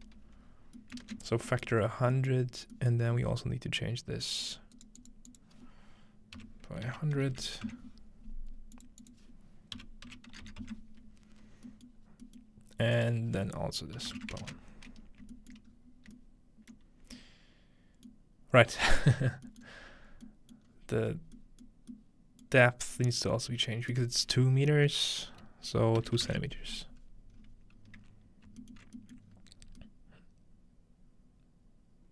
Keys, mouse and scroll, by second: 0.4-1.5 scroll down 3, 1.1-2.2 ctrl+middle drag, 1.5-4.5 scroll up 4, 2.2 middle click, 3.2 middle click, 3.3 typing, 4.5 click, 4.8-6.6 right drag, 5.1 click, 5.4-6.6 drag, 6.4-8.0 typing, 8.7-10.9 drag, 11.5 scroll down 2, 12.0 scroll up 2, 13.0 click, 15.6-16.7 ctrl+shift+middle drag, 15.7-16.7 scroll up 2, 18.2 middle click, 19.2 scroll down 2, 19.8 scroll down 2, 20.7-21.2 scroll up 3, 20.8 middle click, 21.7 middle click, 22.5 middle click, 22.5-25.8 scroll up 1, 23.4-25.8 middle drag, 23.9-25.8 drag, 27.4-27.8 scroll up 1, 27.8-28.5 scroll down 1, 28.8 alt+middle click, 29.3 middle click, 29.3-29.9 scroll up 2.